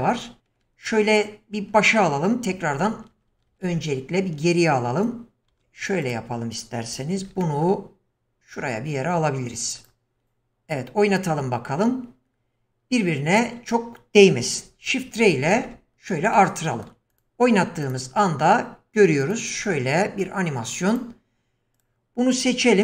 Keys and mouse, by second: 2.5 ctrl+z, 2.8 ctrl+z, 3.1 ctrl+z, 3.3 ctrl+z, 3.7 ctrl+z, 5.1-5.4 drag, 5.5 Delete, 7.2 shift+d, 10.2 click, 11.2 click, 14.6 shift+r, 15.0 shift+r, 15.3 shift+r, 15.5 shift+r, 16.3-16.9 shift+middle drag, 17.2 click, 17.9 click, 19.2 click, 19.6-20.2 middle drag, 21.0 drag, 22.7 q.